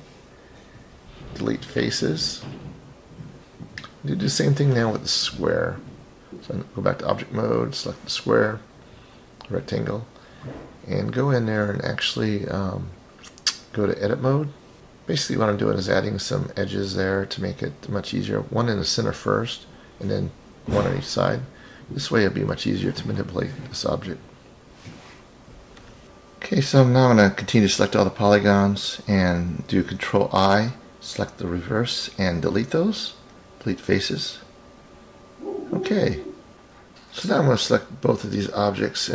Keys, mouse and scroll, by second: 0.4-1.1 drag, 1.9 click, 4.2-4.9 scroll down 1, 4.9 scroll down 2, 10.8-12.6 drag, 13.1-13.6 middle drag, 15.3 click, 16.7 click, 18.0 click, 19.8-20.5 drag, 22.1-22.6 drag, 23.8 click, 25.7 click, 27.0 click, 28.1 click, 28.9 click, 30.7 ctrl+shift+click, 31.4 shift+click, 33.9 ctrl+i, 35.1 Delete, 38.0-38.7 scroll up 4, 38.7-39.1 scroll up 3.